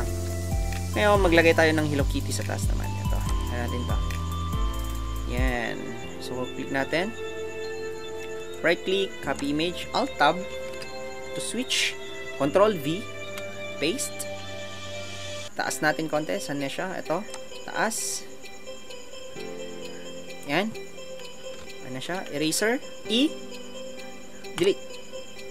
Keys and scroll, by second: 1.2 ctrl+alt+Tab, 10.7 alt+Tab.